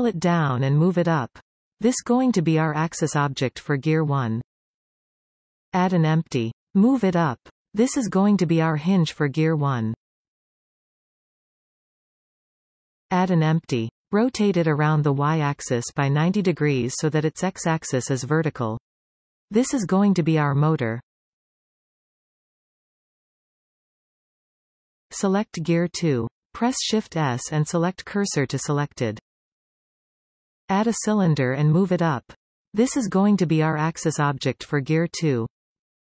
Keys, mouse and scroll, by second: 2.1 s, 3.4 g, 4.9-7.1 middle drag, 7.1 shift+a, 9.7 s, 10.8-11.1 scroll down 1, 11.1 g, 13.6 shift+a, 16.3 s, 17.6 r, 20.1-22.2 scroll up 1, 22.2-23.6 scroll down 2, 23.6 middle click, 25.3 click, 26.8 shift+s, 30.6 shift+a, 35.5 s.